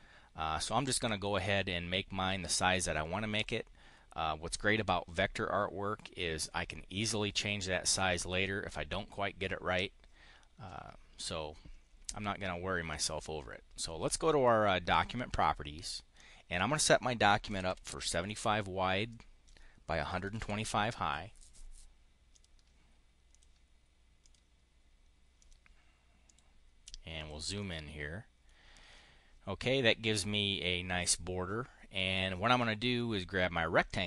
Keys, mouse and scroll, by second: 12.8 click, 14.8 click, 16.0 click, 17.1-18.0 typing, 19.0 click, 19.7-20.7 typing, 22.2 click, 23.2 click, 24.1 click, 25.2 click, 26.1 click, 27.0 click, 27.4-28.2 scroll down 1, 28.2 scroll down 1, 32.3 click, 33.7-34.0 drag.